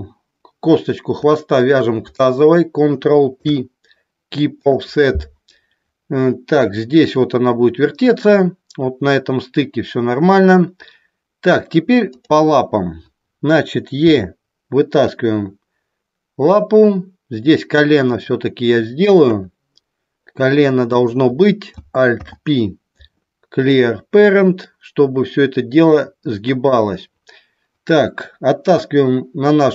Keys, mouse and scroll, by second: 1.6 shift+click, 3.3 ctrl+p, 12.1 click, 18.2 click, 19.2 KP_1, 20.9 click, 22.0 alt+p, 24.5-26.6 drag.